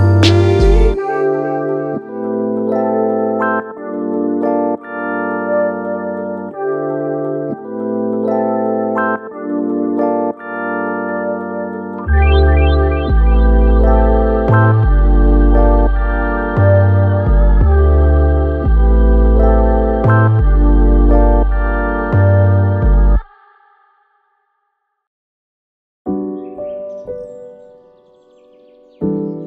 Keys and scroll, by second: 14.4 super+z, 18.5 space, 20.4 space.